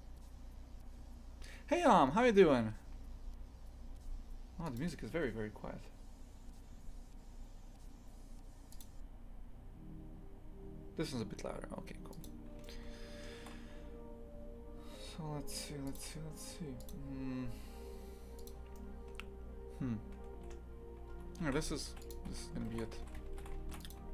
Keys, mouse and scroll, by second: 12.2 click, 12.6-18.4 shift+middle drag, 18.4 click, 18.7-21.1 shift+middle drag, 21.1 Tab, 21.4 shift+f, 22.3 z, 22.7 shift+f.